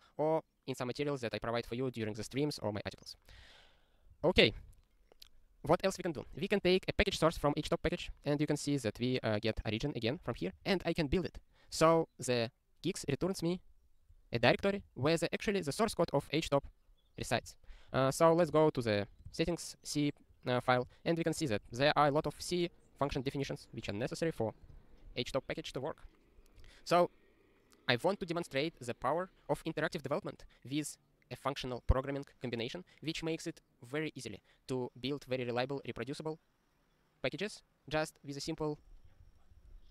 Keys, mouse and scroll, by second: 3.3 ctrl+e, 4.2 ctrl+n, 4.3 ctrl+n, 7.2 click, 7.4 ctrl+b, 7.7 ctrl+e, 10.3 ctrl+g, 10.6 ctrl+e, 11.8 ctrl+e, 26.6 super+o, 39.1 ctrl+n, 39.2 ctrl+n, 39.6 ctrl+p.